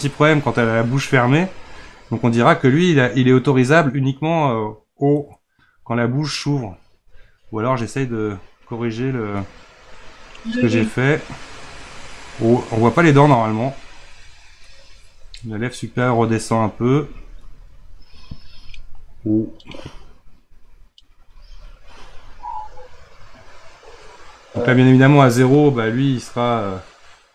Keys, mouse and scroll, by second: 8.0-27.3 drag.